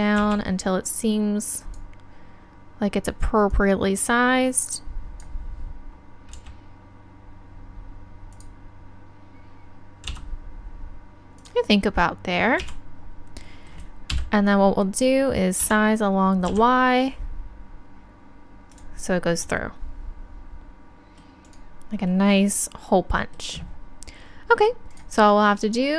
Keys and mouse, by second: 0.2 z, 3.5 click, 8.4-10.1 drag, 10.1 s, 11.4-13.3 drag, 12.6 z, 14.1 KP_3, 15.6 s, 18.7-21.4 drag, 24.9-25.9 drag.